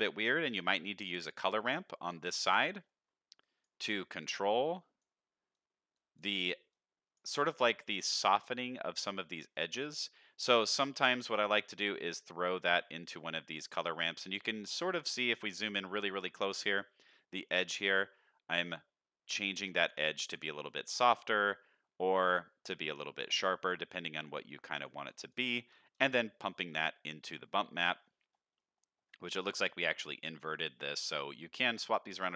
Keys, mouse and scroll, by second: 0.5 shift+d, 1.7 click, 2.4 ctrl+shift+drag, 2.8 middle click, 3.4 drag, 3.9-5.0 drag, 5.5-6.1 drag, 6.7-7.1 drag, 7.8 shift+middle drag, 8.3 scroll up 1, 9.5 click, 10.5-11.5 drag, 12.1-14.1 drag, 14.4-15.1 scroll up 2, 15.3-15.6 scroll down 1, 15.7 shift+middle click, 16.1-17.4 scroll up 1, 18.0-19.9 drag, 20.7-23.2 drag, 23.5 middle click, 24.2 middle click, 24.7 click, 25.0 click, 25.5 middle click, 25.9 ctrl+shift+click, 26.5 middle click, 27.4-28.3 scroll down 6, 28.6 middle click, 29.0 scroll up 1, 30.6-31.5 scroll up 2, 32.2 click.